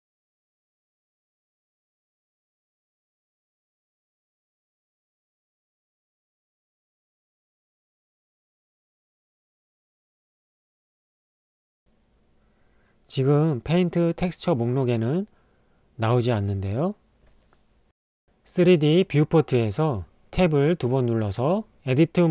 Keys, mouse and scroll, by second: 8.4 click, 9.0 ctrl+middle click, 10.0 ctrl+middle click, 10.8 middle click, 11.6 ctrl+middle click, 12.3-13.6 drag, 18.7 click, 20.4 Tab, 20.8 Tab.